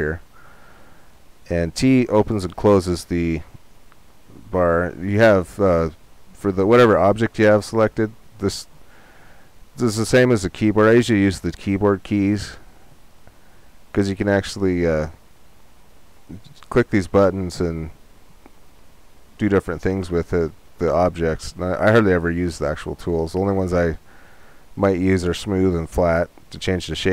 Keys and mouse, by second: 0.0-3.7 drag, 4.1 t, 6.7-8.6 drag.